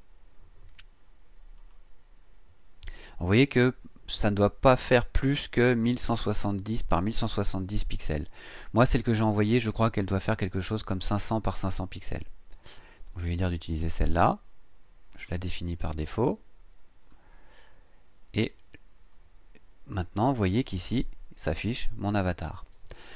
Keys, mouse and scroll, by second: 1.6 click, 13.2 click, 15.1 click, 17.5-18.0 scroll down 2, 19.3-19.6 scroll up 2.